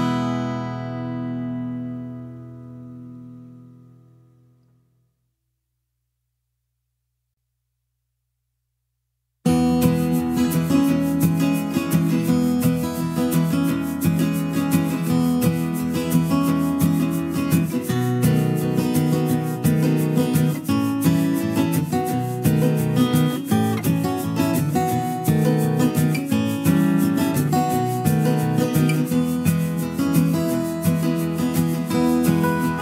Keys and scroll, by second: 3.8 ctrl+z, 25.8 ctrl+z.